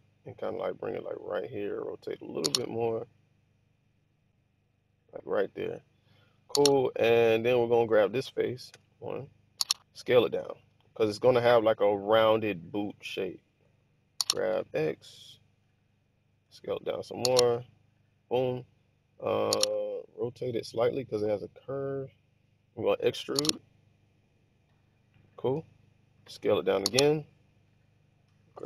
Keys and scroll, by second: 1.9 r, 8.6 1, 10.5 s, 13.5 g, 14.4 x, 16.4 s, 20.2 r, 22.8 e, 26.2 s, 28.4 g.